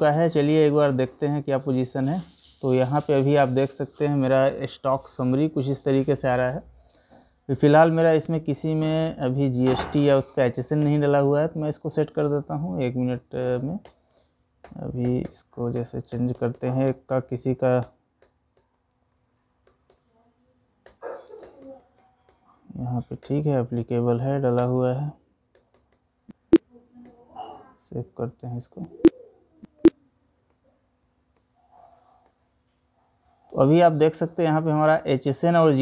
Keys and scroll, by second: 12.1 Up, 20.4 ctrl+Return, 28.3 Escape.